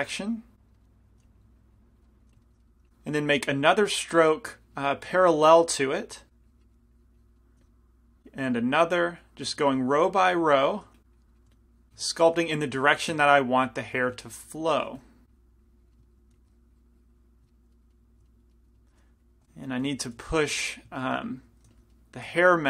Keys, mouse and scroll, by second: 0.1-2.9 drag, 0.1-1.3 right drag, 1.3 f, 2.3 f, 2.9 f, 2.9 f, 3.7-7.4 drag, 5.2 f, 7.7 f, 9.8 f, 11.0 f, 11.5 f, 12.3-13.5 drag, 12.8 f, 14.1 f, 15.1 f, 15.4 click, 16.4 f, 16.5-18.0 drag, 19.5 i, 20.0 f, 20.5 middle click, 20.9-22.2 middle drag, 21.9 f.